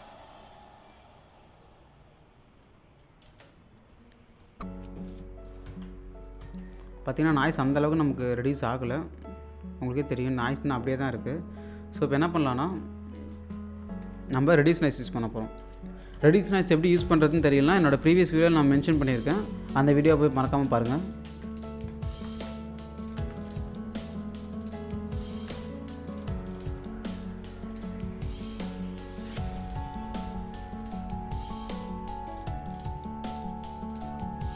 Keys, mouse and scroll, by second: 0.1 click, 3.3 space, 4.8 alt+click, 5.7-8.7 typing, 6.3 click, 8.3-9.1 scroll down 1, 9.2 click, 10.4-11.3 scroll down 1, 13.3 click, 14.7 Tab, 15.5 Caps_Lock, 15.8-17.0 typing, 17.8 Caps_Lock, 18.4 e, 19.2 Down, 20.5 ctrl+a, 20.8-22.3 typing, 22.9 Down, 23.2 Return, 23.7-24.1 scroll up 1, 24.1 click, 25.5 1, 26.2 scroll down 1, 26.5 alt+click, 28.0 typing, 28.1 click, 30.8-34.5 drag.